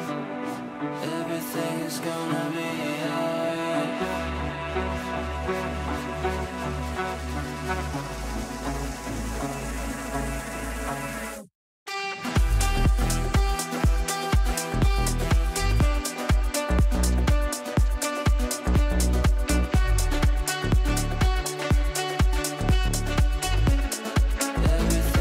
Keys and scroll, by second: 1.4 g, 23.2 ctrl+z.